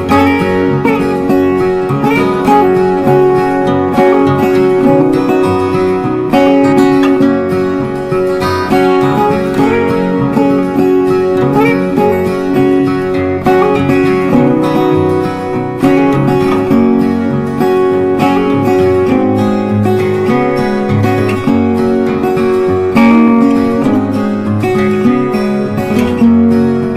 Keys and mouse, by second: 0.2 click, 3.4 right click, 4.9 click, 7.6 click, 7.7 click, 11.7 click, 12.6 click, 16.6-26.5 drag, 26.6 shift+Num_Lock, 26.6 click.